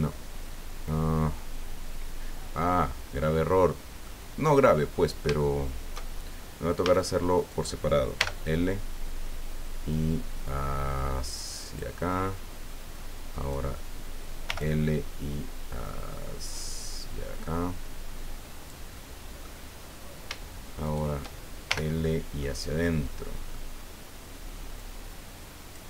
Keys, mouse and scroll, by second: 4.0 click, 4.8-5.2 scroll up 2, 5.4 shift+click, 6.8 a, 7.3 right click, 8.2 l, 9.9-11.9 right drag, 13.3 right click, 14.5 l, 17.0-18.9 right drag, 18.9 middle click, 19.7 scroll down 1, 20.8 shift+right click, 21.6 shift+l, 22.0 click, 22.8 click, 24.8-25.8 drag.